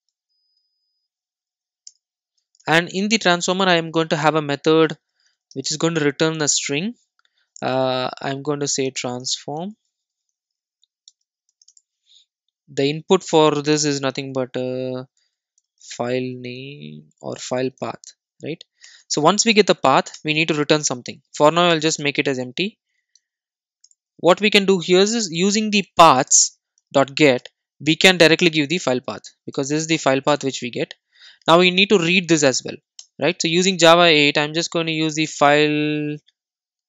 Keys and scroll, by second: 4.0 Return, 20.2 Return, 27.5 Return.